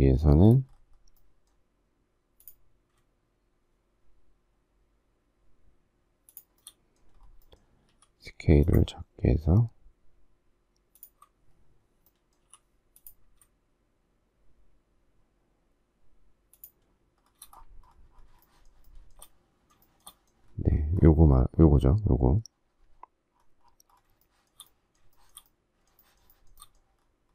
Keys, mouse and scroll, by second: 6.3 shift+click, 6.5 shift+middle click, 7.8 s, 8.7 ctrl+click, 10.9 ctrl+click, 12.5 m, 16.5 shift+click, 16.9 shift+scroll, 18.4 shift+middle click, 18.9 shift+middle click, 19.8 shift+middle click, 20.0 shift+middle click, 24.2 shift+middle click, 25.1 shift+middle click, 25.3 shift+middle click, 26.0 shift+middle click, 26.2 shift+middle click, 26.3 shift+middle click, 26.5 shift+double middle click, 26.6 shift+middle click.